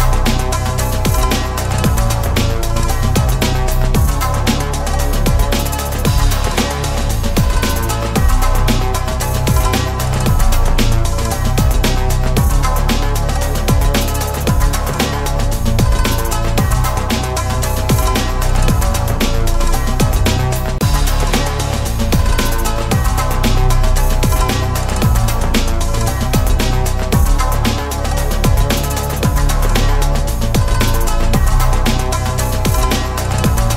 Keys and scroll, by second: 15.8 ctrl+v, 17.7 alt+a.